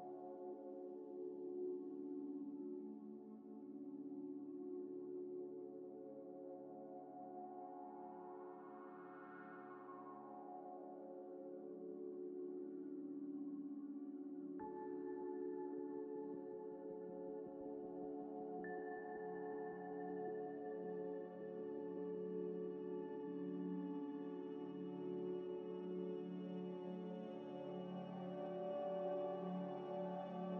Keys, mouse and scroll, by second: 0.0 scroll down 1, 0.6 z, 1.6 alt+Tab, 3.2 alt+Tab, 4.1 scroll up 1, 5.6 alt+Tab, 7.0 alt+Tab, 7.4 alt+Tab, 7.9 scroll down 1, 9.6 alt+Tab, 12.6 Tab, 18.1 Tab, 19.0 u, 22.5 scroll up 1, 23.1 u, 27.7 scroll down 1, 28.4-28.7 scroll up 1, 28.8 scroll down 1, 28.9 Tab, 30.0 Tab, 30.3 scroll, 30.3 scroll down 1.